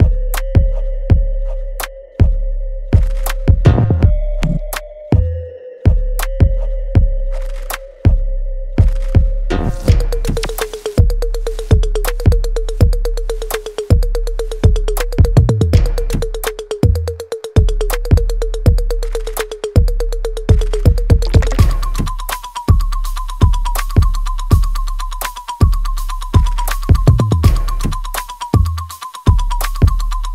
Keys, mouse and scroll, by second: 0.0 click, 0.0 alt+click, 0.5 alt+middle click, 0.8 alt+right click, 1.3 click, 2.2 alt+middle click, 2.8 alt+right click, 4.2 click, 4.2-10.3 drag, 10.3-13.3 shift+drag, 14.5 click, 18.5 click, 22.8 g, 23.4 scroll down 1, 23.9 alt+right click, 24.2 alt+click, 24.7 alt+middle click, 25.2 alt+right click, 26.5-27.9 alt+drag.